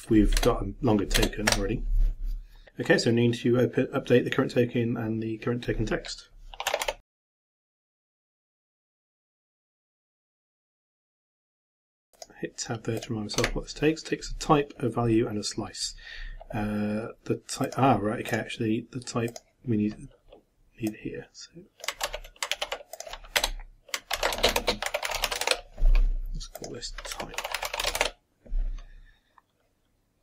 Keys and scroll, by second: 7.1-11.9 typing, 22.1 ctrl+c, 22.5 ctrl+x, 24.2 ctrl+v, 24.4 ctrl+space, 24.5 ctrl+=, 24.6 ctrl+space, 24.9 ctrl+t, 25.1 ctrl+y, 25.2 ctrl+p, 25.3 ctrl+e, 25.4 ctrl+shift+-, 28.0 shift+-.